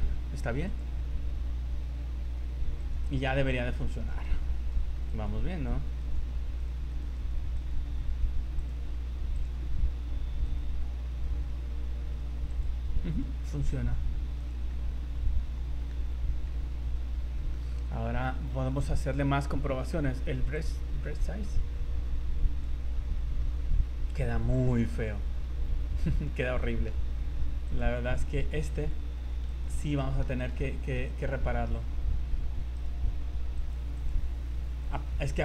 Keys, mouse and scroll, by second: 0.6 click, 2.9 right click, 4.0 right click, 4.6 right click, 5.1 right click, 5.6 right click, 6.1 right click, 6.6 right click, 6.9 right click, 7.6 right click, 8.6 click, 10.5 right click, 11.4 r, 13.2 right click, 13.5 r, 14.7 middle click, 16.0 scroll up 3, 16.4 middle click, 17.7 middle click, 18.2-18.8 scroll up 12, 20.6 click, 23.4 middle click, 24.8 middle click, 25.6 scroll up 3, 26.0 middle click, 27.7 click, 28.8 z, 29.3 z, 29.5 right click, 30.0 middle click, 30.4 right click, 31.1 right click, 31.7 z, 32.4 z, 32.8 right click, 33.5 click, 33.9 click.